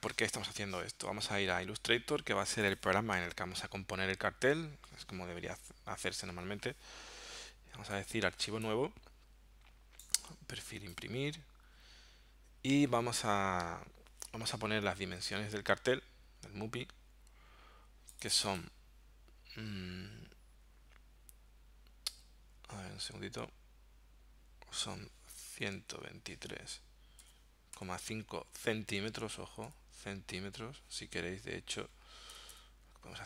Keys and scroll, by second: 25.6 1, 25.8 2, 26.1 3, 27.2 ,, 27.8 5, 28.8 c, 29.7 m, 32.3 BackSpace.